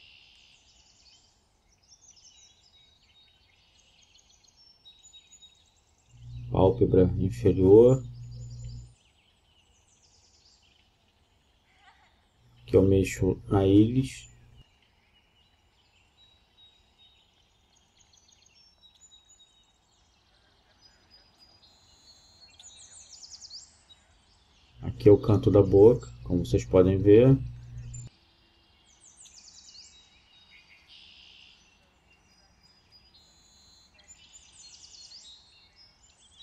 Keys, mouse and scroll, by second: 0.5 g, 2.4-4.1 right drag, 5.3-7.0 right drag, 9.4-11.1 right drag, 10.4 g, 12.1-13.7 right drag, 12.9 g, 13.7 middle click, 15.3-17.0 middle drag, 18.7 middle click, 19.4 right click, 19.5 middle click, 19.6 right click, 19.7-20.4 middle drag, 19.7 g, 20.4 right drag, 22.5-24.1 right drag, 23.3 g, 24.5-26.2 right drag, 26.3 right drag, 29.4-31.1 right drag, 30.7 g, 33.8-35.6 right drag, 34.7 g.